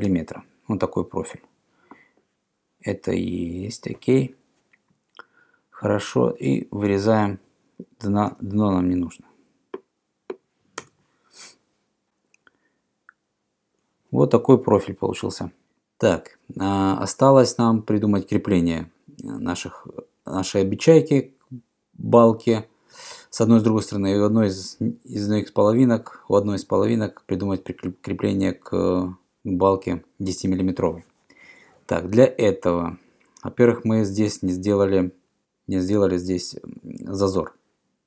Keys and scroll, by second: 8.3 e, 10.9 Return.